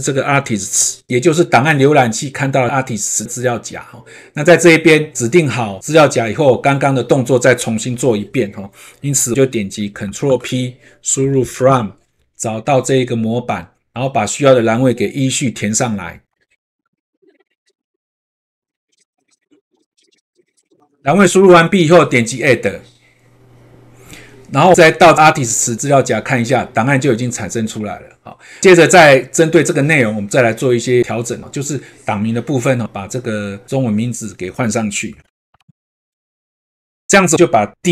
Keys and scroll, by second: 10.2 ctrl+p, 16.3 ctrl+`, 16.8 ctrl+`, 17.1 ctrl+v, 17.3 ctrl+`, 17.5 ctrl+v, 17.7 ctrl+space, 17.8 Print, 17.9 ctrl+space, 18.1 ctrl+`, 18.3 ctrl+v, 18.6 ctrl+`, 18.7 ctrl+v, 18.9 ctrl+`, 19.0 ctrl+v, 19.2 ctrl+`, 19.4 ctrl+v, 19.6 ctrl+`, 19.8 ctrl+v, 19.9 ctrl+`, 20.1 ctrl+v, 20.3 ctrl+`, 20.5 ctrl+v, 35.2 ctrl+c, 35.6 ctrl+a, 35.7 ctrl+v.